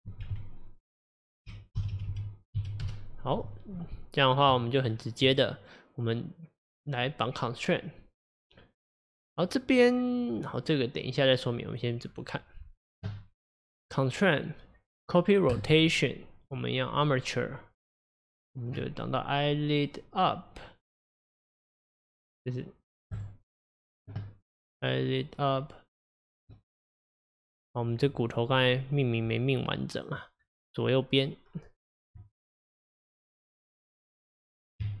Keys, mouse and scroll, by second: 2.0 Delete, 2.1 Delete, 3.8 Tab, 4.9-5.3 scroll down 1, 5.3 click, 11.7 click, 13.9-20.9 drag, 26.6-27.6 middle drag, 27.6 click, 28.6 click, 30.0 click, 33.0 scroll down 4, 33.3-34.9 middle drag, 34.9 Tab.